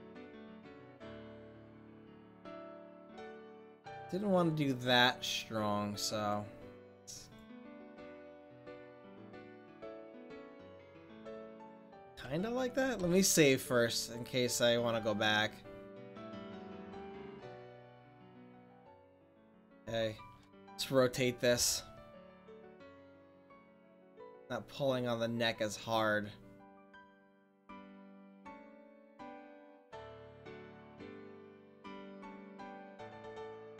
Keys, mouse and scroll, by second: 3.6 ctrl+z, 6.5 click, 7.4-9.1 drag, 9.6-11.0 drag, 11.0 ctrl+z, 12.3 ctrl+z, 13.0 ctrl+s, 14.0-15.1 drag, 15.3 middle click, 18.2 r, 21.5 r.